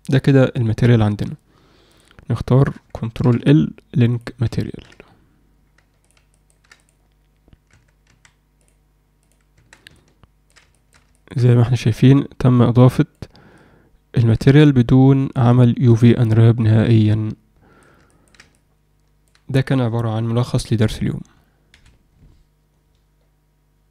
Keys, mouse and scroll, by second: 6.0 click, 6.3 ctrl+alt+middle click, 8.5-9.3 drag, 9.9-10.5 alt+middle drag, 10.7 alt+shift+middle click, 11.1 ctrl+alt+middle click, 11.5-11.8 alt+middle drag, 12.5 click, 13.6-14.3 alt+middle drag, 14.7-15.3 ctrl+alt+middle drag, 15.6-17.8 alt+middle drag, 18.0 ctrl+alt+middle drag, 18.6-19.2 alt+middle drag.